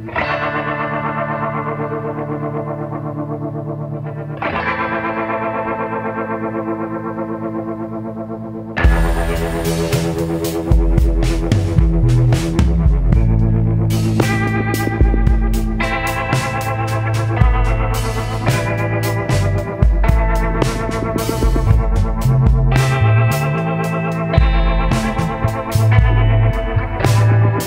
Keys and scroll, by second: 15.5 ctrl+z, 16.0 ctrl+z, 23.2 scroll.